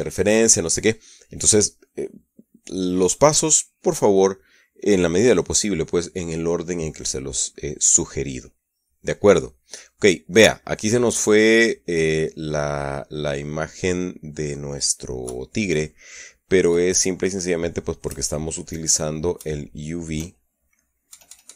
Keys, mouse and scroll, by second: 10.3-12.9 middle drag, 13.1-15.5 middle drag, 15.9 KP_Subtract, 17.9 middle click, 18.7 KP_Add, 19.6 middle click, 20.0 KP_Add, 20.9 middle click.